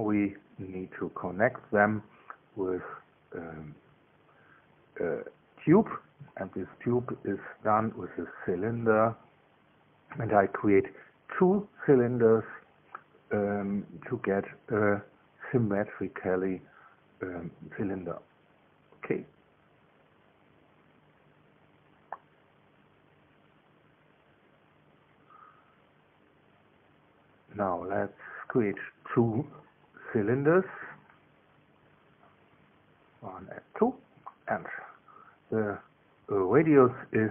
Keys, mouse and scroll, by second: 5.3-7.9 drag, 14.6 KP_2, 30.2 click, 33.3 click, 34.3-35.0 scroll down 1, 35.0-37.3 drag.